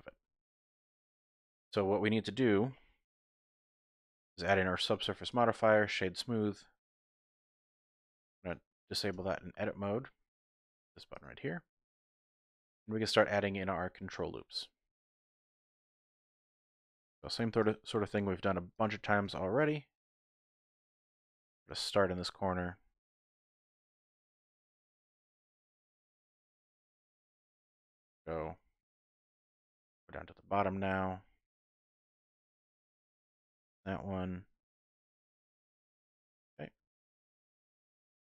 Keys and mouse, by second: 1.3 shift+click, 1.6 click, 3.4 ctrl+2, 5.0 click, 8.5 click, 9.1 Tab, 10.8 click, 11.1 click, 11.7 middle click, 12.1 click, 12.6 shift+click, 12.9 click, 13.6 shift+click, 15.0 click, 15.4 middle click, 17.0 ctrl+r, 18.7 click, 18.9 ctrl+r, 21.0 click, 21.4 ctrl+r, 23.3 click, 23.6 middle click, 24.0 click, 24.6 ctrl+r, 26.5 click, 26.9 middle click, 27.5 shift+middle click, 28.7 shift+middle click, 30.1 middle click, 30.8 shift+middle click, 32.8 ctrl+r, 35.0 click, 36.2 click, 36.9 shift+click.